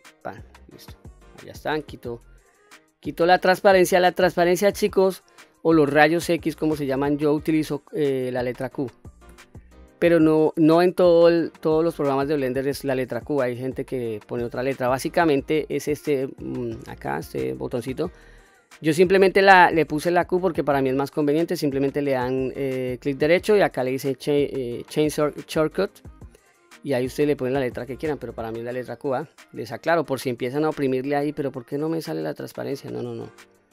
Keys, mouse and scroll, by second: 0.1 click, 0.5-1.0 middle drag, 1.6 q, 2.2-2.6 scroll down 2, 2.7 middle click, 6.0 click, 8.6 q, 9.3 q, 21.8-27.3 right drag, 27.9-28.3 scroll up 2, 28.3-28.9 middle drag, 29.3-29.8 scroll up 2, 29.8-30.8 scroll down 1, 31.6-32.0 scroll up 1, 32.0-32.5 scroll down 2, 32.5-32.9 middle drag, 33.3-33.7 scroll up 2.